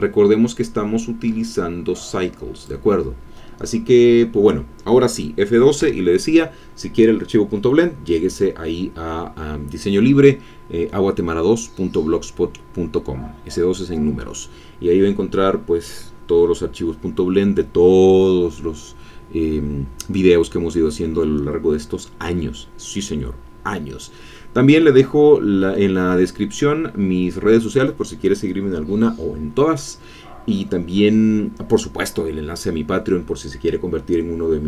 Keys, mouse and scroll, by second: 0.2-2.9 drag, 5.8 F12.